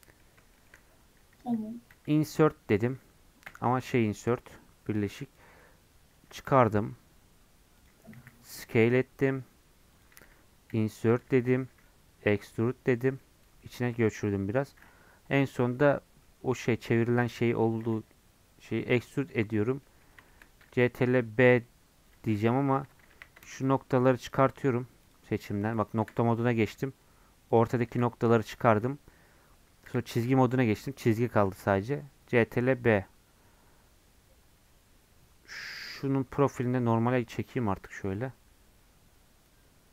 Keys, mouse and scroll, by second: 0.2 middle click, 0.9-1.9 scroll up 1, 1.9 i, 13.2-15.6 middle drag, 15.6 i, 17.4 middle click, 17.8 e, 19.8 middle click, 20.7 ctrl+b, 22.4 2, 23.7 shift+click, 24.3 shift+click, 25.8 shift+click, 29.9 2, 31.5 ctrl+b, 37.0-39.9 drag.